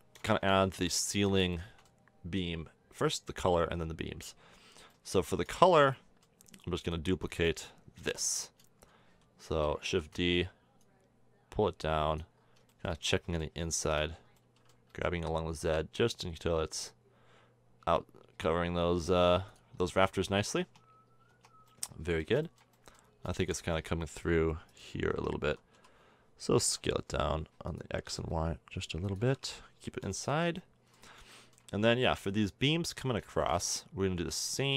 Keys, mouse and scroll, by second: 0.6 middle click, 0.9-1.5 middle drag, 1.8-5.2 middle drag, 5.6 middle drag, 6.0-7.2 middle drag, 7.2 click, 8.7-9.8 middle drag, 9.8 shift+d, 13.9-14.7 middle drag, 14.9 g, 19.8-20.5 middle drag, 20.5 a, 20.7 Tab, 21.3 Tab, 22.3 middle click, 25.1 Tab, 25.7 s, 27.9 s, 29.2 a, 29.3 Tab, 30.2-30.6 middle drag, 30.7 middle drag, 33.1-34.7 middle drag.